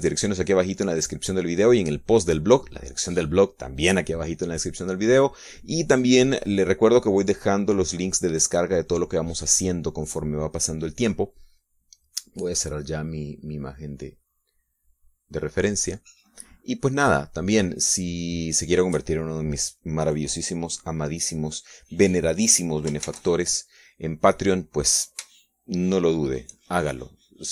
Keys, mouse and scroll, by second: 0.4 shift+click, 1.0 shift+click, 1.4 shift+click, 2.1 click, 2.4 click, 3.1 click, 15.4 click, 16.8 click, 18.0 click, 19.4 click, 24.8 shift+z.